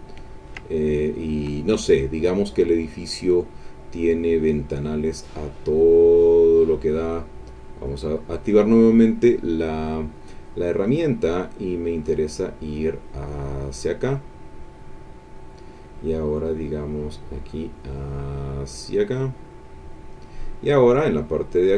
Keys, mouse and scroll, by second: 0.3 ctrl+click, 0.7 ctrl+click, 4.7 click, 7.7 click, 9.8 click, 11.9-15.5 drag, 17.4-20.3 drag.